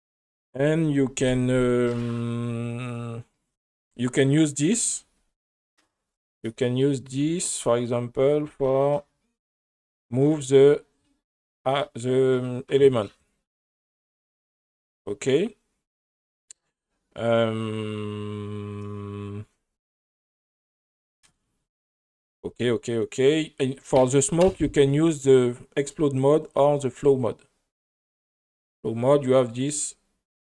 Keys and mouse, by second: 5.9 space, 6.1 space, 6.4 click, 10.6-12.8 drag, 13.3-15.0 drag, 26.4-27.3 drag, 27.9 space, 29.9-30.4 drag.